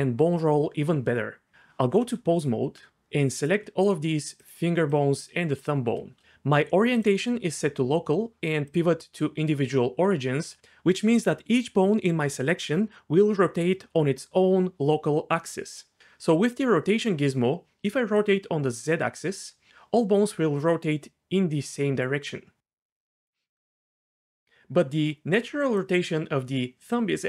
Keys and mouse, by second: 2.1 Tab, 7.0-8.1 drag, 8.7-10.5 drag, 18.2 click, 23.2 click, 24.3 click.